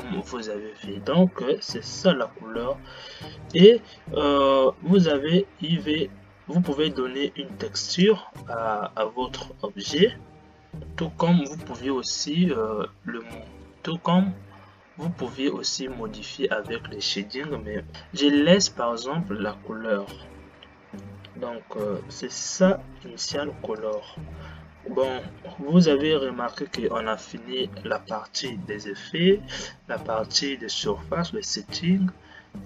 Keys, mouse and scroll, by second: 0.2-32.6 drag.